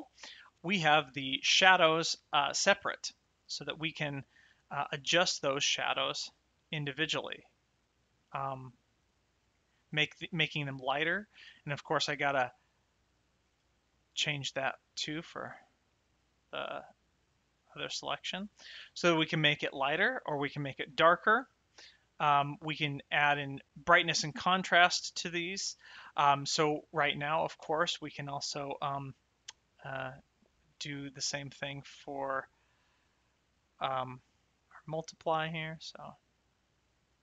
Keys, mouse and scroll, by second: 0.2 click, 0.9 click, 2.5 shift+middle click, 5.4 click, 12.1 click, 13.4 middle click, 14.2 click, 18.9 shift+middle click, 19.4 middle click, 20.5 shift+middle click, 21.8 shift+middle click, 25.6 shift+middle click, 29.1 click, 30.6 middle click, 33.3 middle click, 34.9 click.